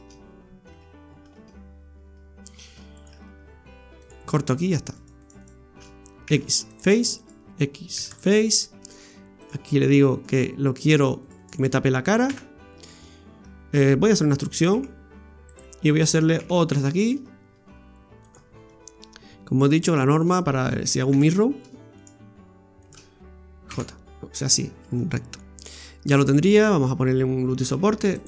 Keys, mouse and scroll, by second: 0.7 Tab, 1.4-1.9 scroll up 1, 1.9-2.7 scroll up 1, 2.9 right click, 4.0 click, 5.0 right click, 5.2 alt+shift+right click, 5.4 right click, 6.2 x, 7.2 right click, 7.9 x, 9.4 click, 10.2 right click, 11.0 right click, 11.2 alt+shift+right click, 11.3 alt+shift+right click, 11.4 right click, 12.3 f, 12.7 scroll down 1, 13.1 middle click, 18.2 click, 18.7 middle click, 19.6 right click, 20.1 shift+right click, 21.1 j, 22.0 right click, 22.8 shift+right click, 23.7 j, 24.7 scroll down 1, 25.0 middle click, 26.4-26.7 scroll up 2, 27.8 ctrl+r.